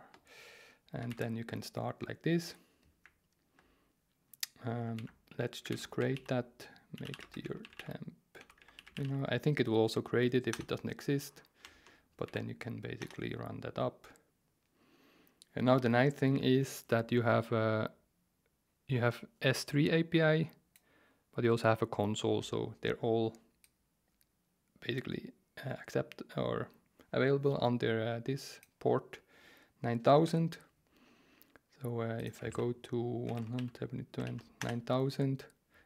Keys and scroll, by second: 0.0-0.2 typing, 1.1 super+v, 4.9 ctrl+c, 5.7 ctrl+c, 5.8-9.5 typing, 10.5 Return, 12.3 super+v, 13.0 Return, 30.3 alt+2, 32.5 super+t, 33.0-34.7 typing.